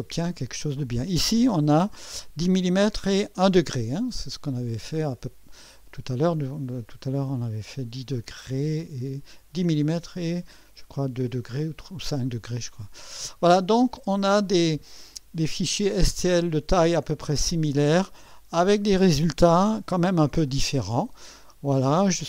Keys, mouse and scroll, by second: 4.1 scroll down 2, 5.5 click, 13.7 scroll down 2, 15.1-18.2 drag, 20.5-22.2 drag.